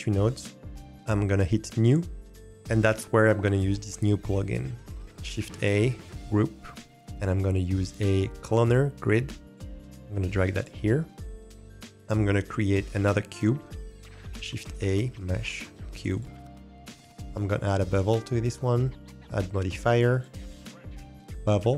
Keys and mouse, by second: 1.8 click, 5.2 shift+a, 14.4 shift+a, 17.6 click, 20.1-21.3 drag.